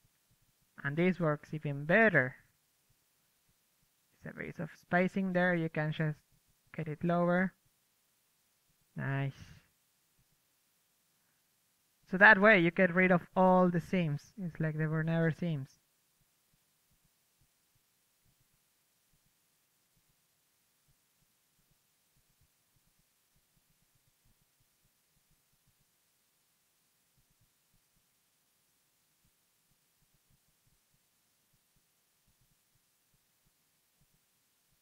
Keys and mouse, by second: 3.2 a, 3.7 a, 4.7 click, 6.3-9.0 drag, 7.5 middle click, 9.0-9.9 middle drag, 9.9-11.2 drag, 11.2-13.4 middle drag, 13.4 click, 13.9-17.4 drag, 17.1-17.6 ctrl+z, 17.7-24.8 drag, 19.1 shift+f, 20.0 KP_3, 20.1-20.9 middle drag, 21.3-24.4 middle drag, 24.6 middle click, 24.7 middle click, 24.9 middle click, 25.1 f, 25.2-27.2 drag, 27.3-34.8 drag.